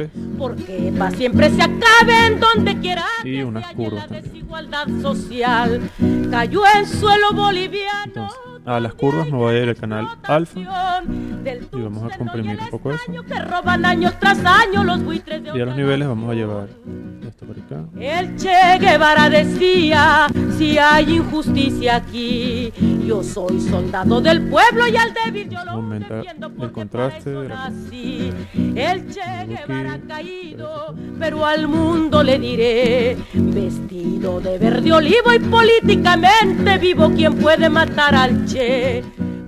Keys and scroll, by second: 0.0-0.3 typing, 4.0-5.3 typing.